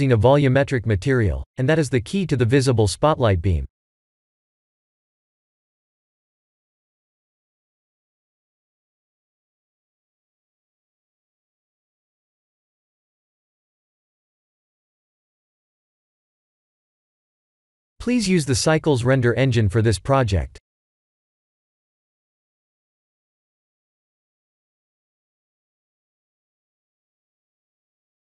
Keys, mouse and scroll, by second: 1.2-5.7 middle drag, 9.7 KP_0, 12.7 click, 15.8 click, 22.5-23.5 drag.